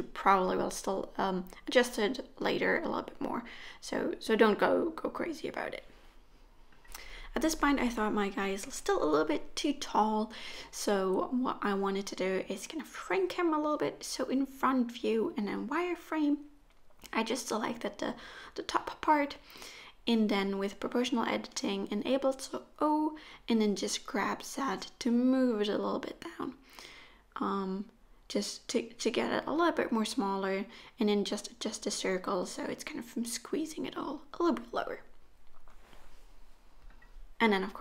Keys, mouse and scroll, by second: 0.0 middle click, 0.5-1.2 scroll down 6, 0.6 middle click, 1.2 click, 1.2 scroll up 7, 1.4 shift+click, 1.6 shift+click, 2.0 KP_1, 2.3-2.8 scroll down 3, 2.9 shift+d, 4.8 middle click, 5.1-5.6 scroll down 2, 5.6 click, 5.8 middle click, 6.3-6.8 scroll down 6, 6.4 middle click, 6.8 shift+middle click, 7.1-7.7 scroll up 1, 7.7 click, 7.7-8.1 scroll up 2, 8.1 middle click, 9.4-9.8 scroll down 3, 10.5 click, 11.0 Tab, 11.5 shift+middle click, 12.2-12.9 scroll down 1, 12.9 KP_1, 14.5 alt+z, 15.3 click, 19.0 o, 19.9 g, 21.9 o, 22.5 g, 24.1 o, 24.3 scroll up 1, 24.3 scroll down 3, 24.5 scroll up 2, 24.6 g, 28.6 alt+z, 28.7 middle click, 29.5 ctrl+z, 29.8 KP_1, 30.1 g, 31.2 alt+z, 31.7 click, 33.0 click, 33.2 click, 33.9 g, 35.8 middle click, 36.3 alt+z, 36.4 middle click, 36.5 click, 36.7 Tab, 36.9 click, 37.2 shift+click, 37.5 g.